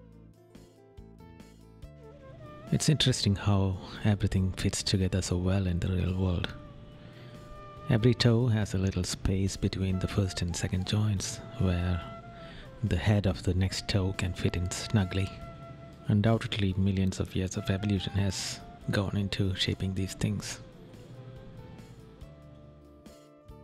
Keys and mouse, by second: 0.6 right click, 1.3 right click, 2.4 right click, 3.5 right click, 4.0 right click, 5.3 right click, 6.2 right click, 8.2 right click, 8.9 right click, 10.6 right click, 11.6 right click, 12.9 right click, 13.4 right click, 14.5 right click, 16.1 right click, 18.0 right click, 21.6 right click, 22.4 right click.